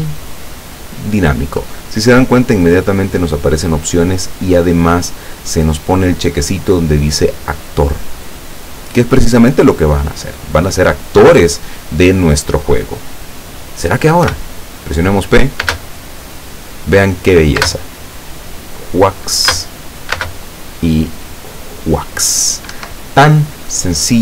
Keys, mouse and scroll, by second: 1.1 click, 14.3 p, 15.7 space, 17.7 space, 19.6 space, 20.2 space, 22.8 Escape.